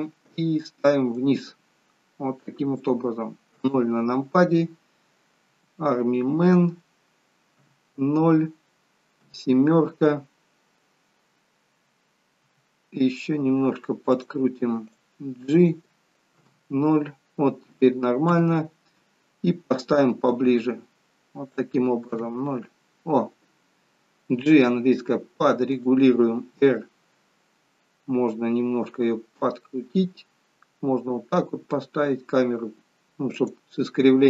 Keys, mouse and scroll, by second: 1.3 click, 3.5 KP_0, 5.6 g, 7.6 KP_0, 9.2 KP_7, 12.4 r, 15.1 click, 16.4 KP_0, 18.4 KP_0, 20.4 click, 22.1 KP_0, 24.5 g, 26.5 r.